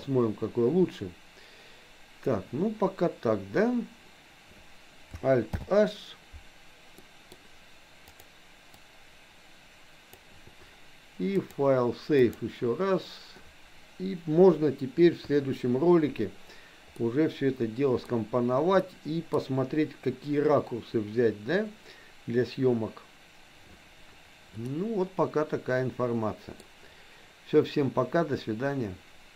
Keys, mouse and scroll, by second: 5.5 alt+h, 7.2 middle click, 8.2 click, 8.8-10.4 drag, 11.5-13.2 drag, 16.9-18.2 middle drag, 18.8 middle click, 24.7-26.7 middle drag.